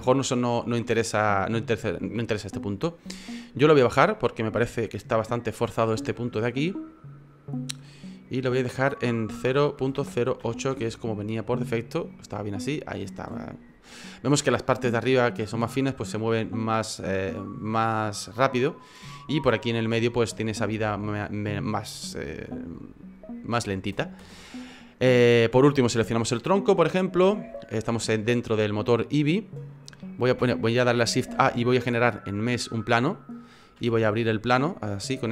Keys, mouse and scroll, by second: 4.6 F9, 6.2 F9, 24.2 space, 25.3 right click, 27.9 click, 29.7 middle click, 31.2 shift+a, 33.8 s.